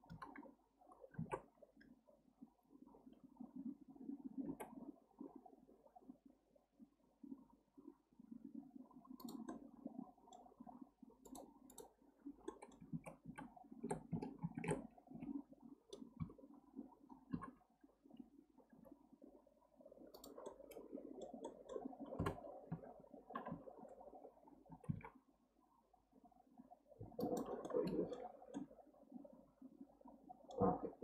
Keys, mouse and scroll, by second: 0.1 KP_1, 1.2 alt+z, 1.8 scroll up 1, 4.4 g, 9.5-10.5 middle drag, 10.5 g, 11.7 right click, 12.5 middle click, 12.9 ctrl+z, 13.2 ctrl+z, 14.4 ctrl+shift+z, 15.1 Tab, 16.2 KP_3, 17.3 KP_1, 18.7 g, 20.4-22.2 middle drag, 22.2 KP_2, 22.7 KP_3, 23.5 KP_1, 24.7 g, 27.7-28.3 middle drag, 28.3 scroll down 4, 28.5-30.7 middle drag, 30.7 scroll up 1.